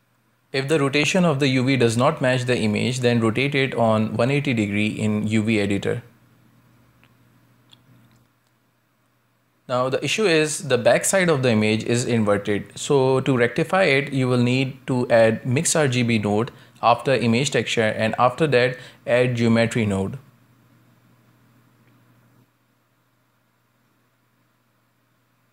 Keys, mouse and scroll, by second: 0.5 scroll up 2, 0.9 shift+middle click, 1.4 scroll up 2, 2.8 r, 6.3 scroll down 2, 6.7-8.4 shift+middle drag, 8.4 Tab, 9.2-10.1 middle drag, 10.1-10.4 scroll down 2, 10.4-14.1 middle drag, 14.1 click, 14.8 scroll down 2, 15.0 middle click, 15.4 shift+a, 20.6-21.1 scroll down 1, 21.1 middle click, 21.7 shift+a.